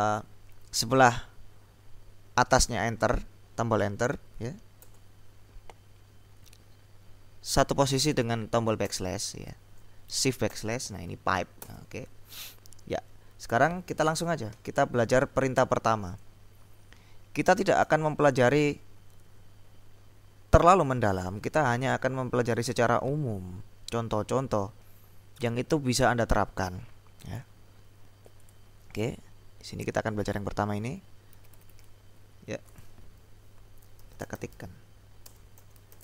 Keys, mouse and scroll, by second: 4.9 BackSpace, 8.9 \, 9.7 BackSpace, 10.6 shift+\, 11.7 BackSpace, 16.4-18.5 drag, 28.5 click, 29.3-30.9 drag, 31.4 ctrl+c, 32.9 click, 33.9-36.0 typing.